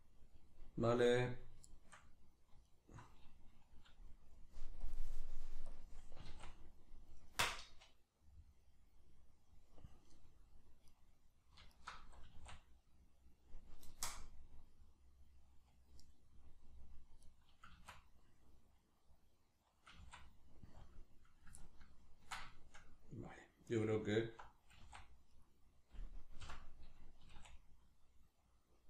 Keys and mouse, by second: 1.7 shift+middle click, 2.7 alt+right click, 4.9-6.2 drag, 6.2 s, 11.0 right click, 11.7 alt+shift+right click, 12.3 s, 17.3 right click, 17.7 s, 18.3 click, 19.9 s, 20.9 click, 21.6-24.1 ctrl+middle drag, 24.1 alt+right click, 24.7 s, 25.5 right click, 26.4 o.